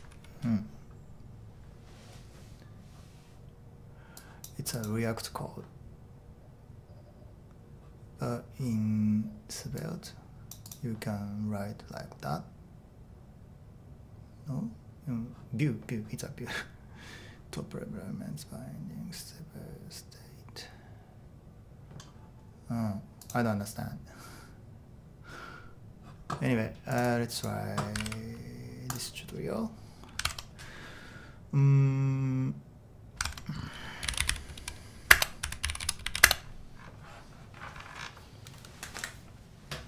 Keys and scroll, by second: 0.0-1.3 typing, 30.3 super+Tab, 33.3 super+Tab, 33.8-37.3 typing.